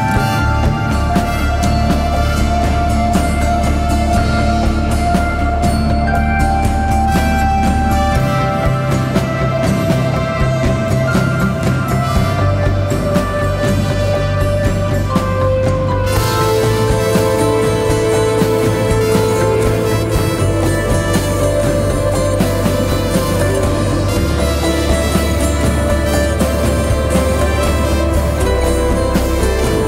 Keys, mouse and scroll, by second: 3.5-8.1 shift+drag, 8.1 scroll down 1, 11.0 shift+Right, 14.9-15.3 scroll down 1, 15.3-16.0 typing, 15.6 click, 16.6 ctrl+y, 17.4 scroll up 1, 17.7-18.2 typing, 18.1 click, 19.4 space, 19.7 click, 19.9 space, 21.9-24.1 typing, 22.1 click, 22.7 click, 23.0 click, 23.9 click, 24.3 click, 25.0 ctrl+y, 26.1-29.8 drag.